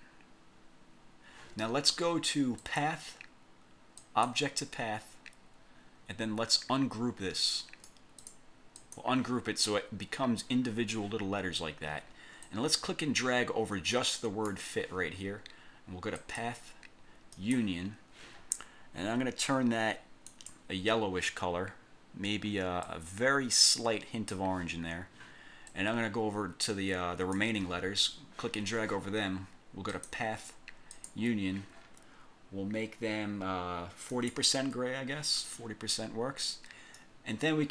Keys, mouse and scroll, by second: 2.8 click, 4.1 click, 7.7 click, 8.3 click, 8.9 click, 12.6-14.8 drag, 16.3 click, 17.5 click, 20.4 click, 22.9-24.6 drag, 25.8-27.7 drag, 30.0 click, 31.0 click, 34.3 click, 37.1-37.7 drag.